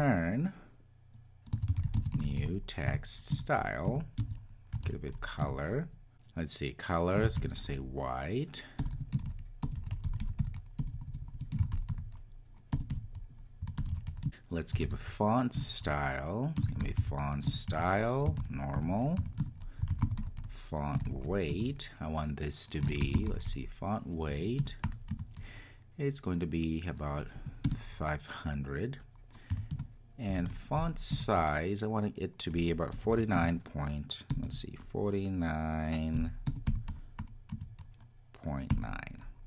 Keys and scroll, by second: 14.2 Return, 15.6 Return, 27.6 Return, 31.1 Return.